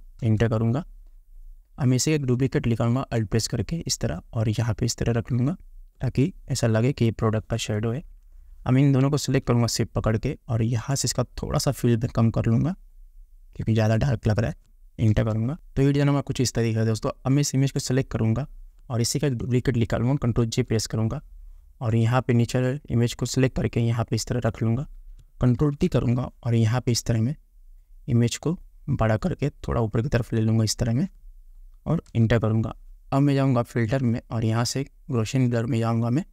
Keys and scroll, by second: 0.5 Return, 15.5 Return, 20.7 ctrl+j, 25.9 ctrl+t, 32.4 Return.